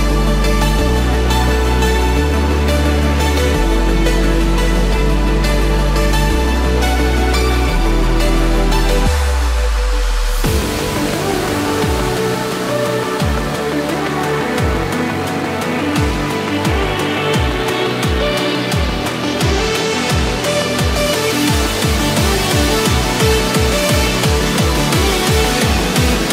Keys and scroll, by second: 5.0 ctrl+-, 5.7 ctrl+=, 9.2 ctrl+-, 9.8 ctrl+-, 10.4 ctrl+=, 17.8 ctrl+=, 19.7 ctrl+=.